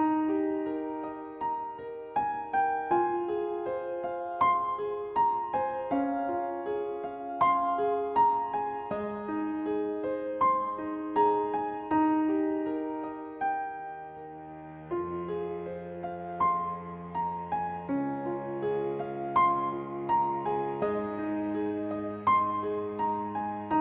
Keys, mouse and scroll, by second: 2.7-4.2 drag, 4.3 click, 5.0-7.0 drag, 7.0 click, 8.2 click, 9.8 click, 11.2 click, 13.3 click, 14.9 click, 18.2 click, 19.4-20.2 scroll down 1, 22.0-22.3 scroll up 1, 23.0 click.